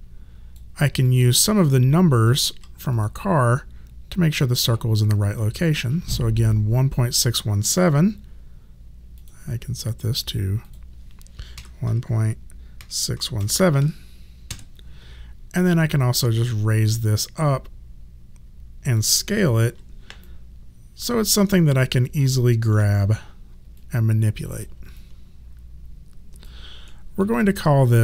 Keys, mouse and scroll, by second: 1.1 alt+click, 6.9 click, 9.2 click, 11.6-13.4 typing, 14.5 KP_Enter, 16.5 click, 19.7 r, 20.2 click, 22.7 w, 23.8 click, 24.9 alt+click, 26.9 alt+middle click, 27.6 alt+click.